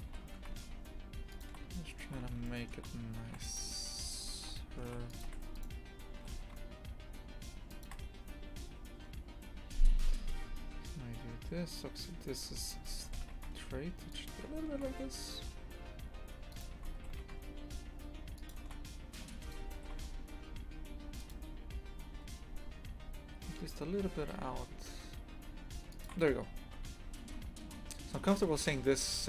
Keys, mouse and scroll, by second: 0.1 g, 1.7-3.3 shift+middle drag, 3.3 ctrl+r, 4.2 Escape, 4.8 ctrl+r, 5.6 right click, 6.2 g, 12.6 right click, 13.0 g, 16.5 right click, 17.0 g, 19.5 right click, 19.8 g, 26.5 scroll down 1, 26.8 Tab, 27.1 scroll down 1, 27.7-28.2 scroll down 10, 28.2 scroll up 1, 28.5 a.